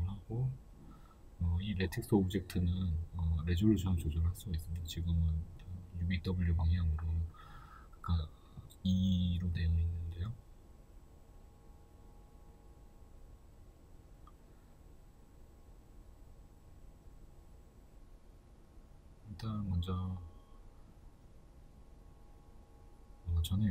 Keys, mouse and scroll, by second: 2.0-3.6 middle drag, 3.6 right click, 6.1-22.7 right drag, 22.7-23.7 middle drag.